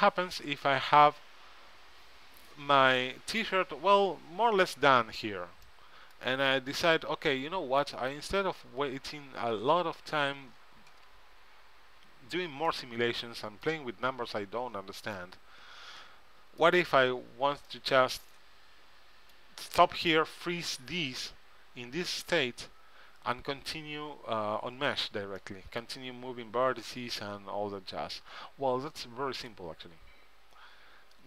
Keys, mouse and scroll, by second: 5.8-8.0 middle drag, 12.8-17.1 middle drag, 17.8-19.5 middle drag, 25.5-27.6 middle drag, 28.5 middle click.